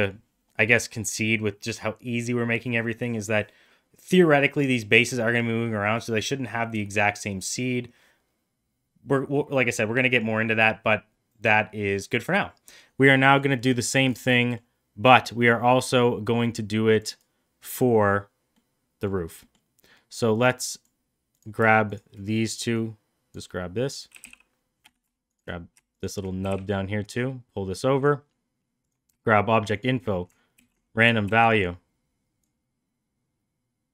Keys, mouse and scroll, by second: 12.6 middle click, 13.6 middle click, 14.4 middle click, 15.5-17.0 drag, 18.5-19.1 middle drag, 19.4 middle click, 20.3 click, 21.3 click, 21.9 shift+click, 22.7-23.3 drag, 24.1 g, 26.4 g, 29.7 shift+click, 30.6 ctrl+c, 31.3 ctrl+v, 32.4-33.9 drag.